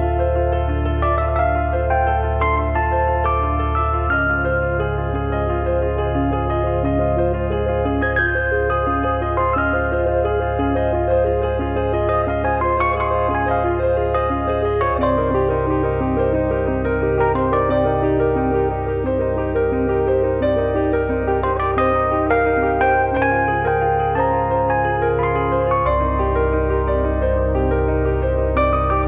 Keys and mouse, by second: 1.8 Tab, 2.7 alt+z, 3.9 Escape, 5.3 a, 7.2 right click, 8.2 g, 9.1 click, 9.5 s, 12.2 shift+h, 12.6 alt+z, 13.5 click, 17.1 Tab, 19.0 click, 23.4 Tab, 23.9 click, 25.0 z, 25.8 shift+click, 27.8 2, 28.4 a.